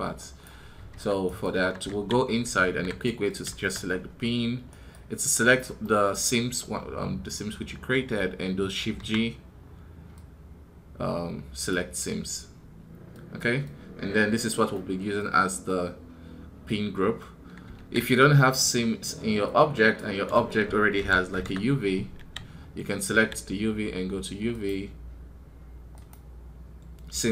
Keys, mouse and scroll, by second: 1.1 right click, 4.5 right click, 19.4-27.3 drag.